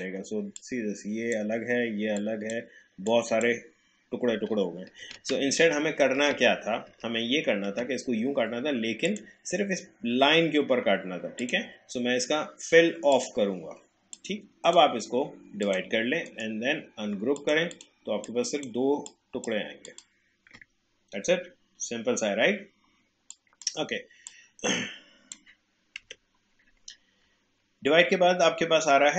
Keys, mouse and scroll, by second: 5.0 ctrl+z, 9.0 click, 11.4-15.6 drag, 16.2 right click, 17.4-19.8 drag, 23.3-26.0 drag, 26.0 Delete.